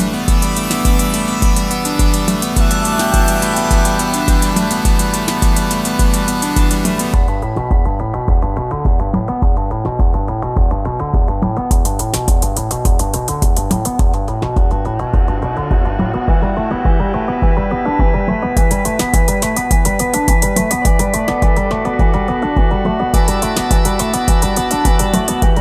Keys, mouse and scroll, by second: 11.4 ], 11.9 double click, 17.2 double click, 20.6 double click, 25.2-25.6 scroll up 1.